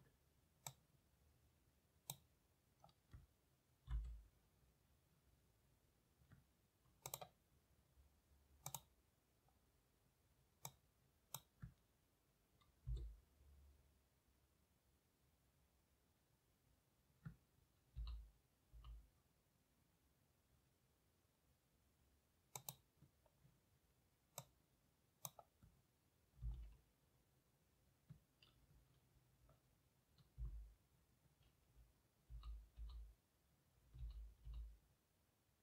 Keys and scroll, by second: 3.9 m, 12.9 m, 18.0-18.7 typing, 26.5 typing, 30.4 m, 32.3-32.8 typing, 34.0-34.5 typing.